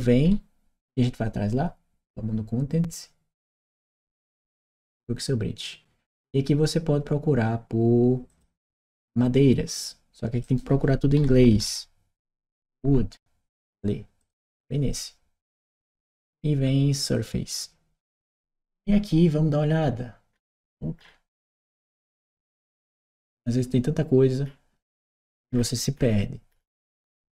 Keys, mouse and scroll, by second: 3.1 click, 8.1 click, 9.5 click, 10.2 click, 14.0 click, 16.8 click, 18.7-20.1 scroll down 2, 20.1-21.5 scroll up 2, 21.5-25.9 scroll down 2, 25.9-27.0 scroll down 1, 27.0-27.3 scroll up 2.